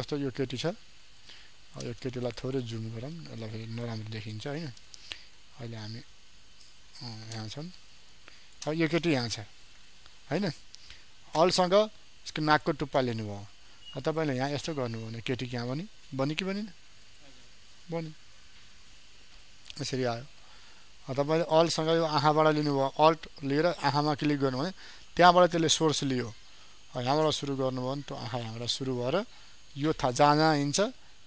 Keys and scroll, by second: 2.1 ctrl+space, 5.4 ctrl+space.